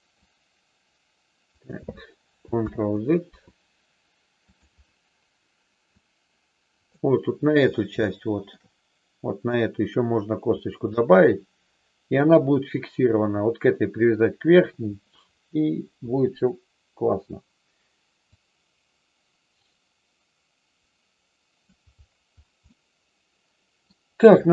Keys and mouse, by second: 0.2-1.7 drag, 2.7 ctrl+z, 4.4 click, 5.9-6.9 drag, 8.1 shift+middle click, 18.3-21.6 drag, 22.7-23.8 middle drag.